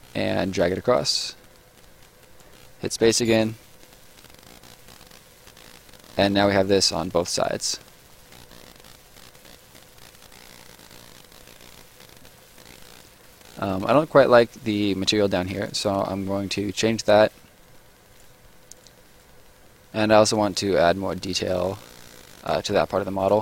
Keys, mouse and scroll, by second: 2.8 space, 4.1 right click, 7.4 click, 7.8 scroll down 1, 7.9 middle click, 8.1 right click, 9.7 scroll down 1, 9.8 right click, 11.9 middle click, 12.5 right click, 13.3 middle click, 13.7 right click, 15.9 middle click, 18.1 click, 23.2 click.